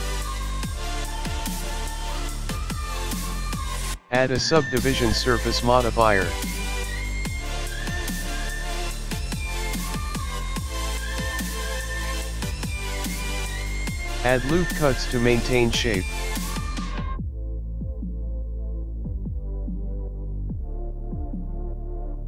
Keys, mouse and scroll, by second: 0.1 KP_7, 0.2 l, 0.4-1.2 scroll up 5, 1.2 middle click, 1.2 scroll up 1, 1.9 middle click, 1.9 KP_1, 3.0 scroll down 4, 3.1 middle click, 3.5 scroll down 1, 3.8 Tab, 4.7 click, 8.1 click, 9.8 middle click, 14.1 Tab, 15.0 ctrl+r, 19.3 middle click, 20.2 ctrl+r, 22.0 middle click.